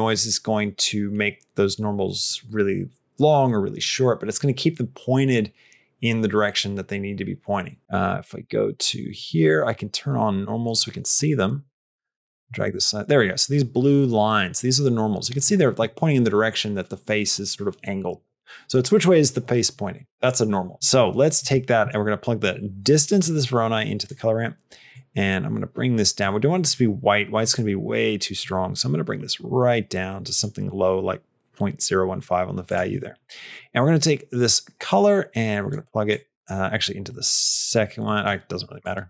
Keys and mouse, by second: 7.8 click, 8.6-12.9 drag, 22.5-24.1 drag, 24.9-26.0 drag, 32.9 middle click, 33.5 click, 34.3-35.7 drag, 35.9 click, 36.7 click, 38.0 click, 38.6-39.0 drag.